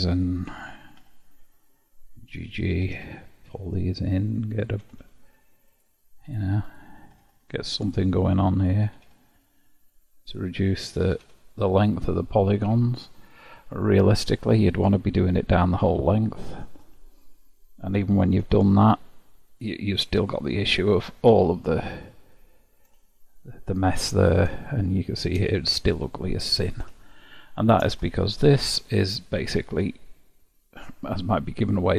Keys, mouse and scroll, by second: 0.1 shift+click, 1.0 j, 1.6 click, 2.7 g, 4.5 click, 4.8 g, 6.6 click, 7.0 g, 8.5 click, 8.8 g, 10.6 click, 11.0 g, 13.0-14.5 shift+middle drag, 14.5-16.1 scroll down 2, 14.7-17.4 middle drag, 17.4-18.4 scroll up 2, 18.4 Tab, 19.3-23.2 middle drag, 23.3-26.4 shift+middle drag, 26.1-27.1 scroll down 6, 27.1-31.0 shift+middle drag, 31.4-31.9 middle drag.